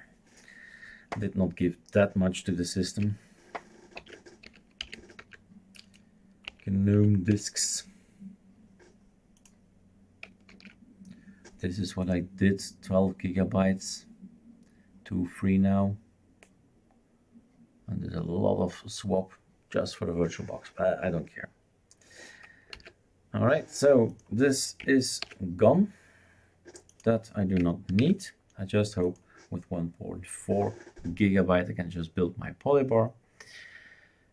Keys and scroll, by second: 4.0 shift+super+d, 4.2-5.7 typing, 6.5 Right, 6.9 Right, 7.3 Return, 10.5 super+f, 22.7 super+f, 25.3 shift+super+q, 28.1 shift+super+q.